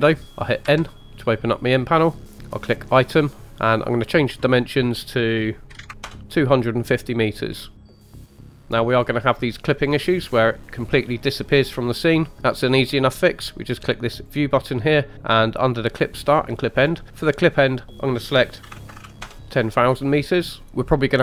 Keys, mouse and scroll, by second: 0.6 n, 2.7 click, 3.9-6.6 drag, 7.5-8.9 scroll down 10, 8.6 scroll up 3, 8.9-9.8 scroll down 1, 9.8-10.2 scroll down 2, 10.2 scroll up 2, 10.8-11.3 scroll down 2, 11.2-12.3 scroll up 2, 14.1 click, 17.2-19.2 drag, 18.9 KP_0, 19.0 KP_0, 20.6-21.0 scroll down 2.